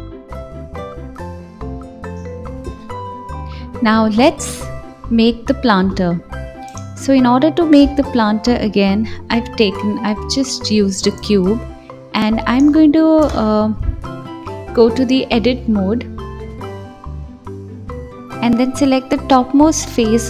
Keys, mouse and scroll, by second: 0.1 click, 0.5-1.4 scroll down 1, 1.4 click, 6.5-7.7 scroll down 1, 7.7 x, 8.4 shift+a, 10.6 s, 13.3-13.8 drag, 13.8-16.1 middle drag, 16.1-18.3 drag, 19.9 KP_7.